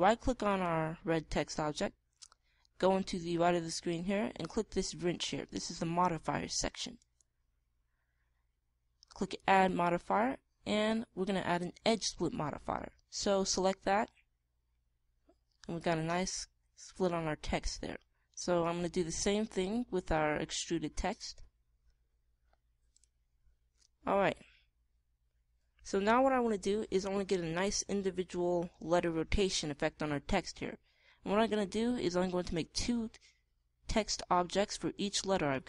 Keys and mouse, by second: 1.4-3.2 right drag, 7.9-9.7 right drag, 10.2-12.0 right drag, 12.0-14.6 middle drag, 15.8-17.7 middle drag, 19.6-21.4 drag, 22.0-23.7 drag, 25.2-29.9 middle drag, 33.2-35.0 right drag.